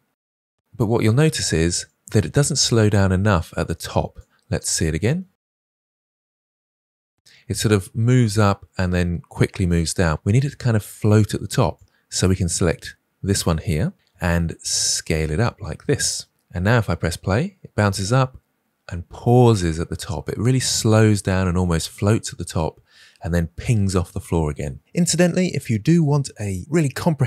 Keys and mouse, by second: 0.6 space, 1.8-4.1 drag, 5.1 space, 7.5-9.6 drag, 7.5 space, 11.7-13.2 drag, 14.0 s, 16.5 space, 19.1 space, 24.4 space, 25.4 click, 25.5 space.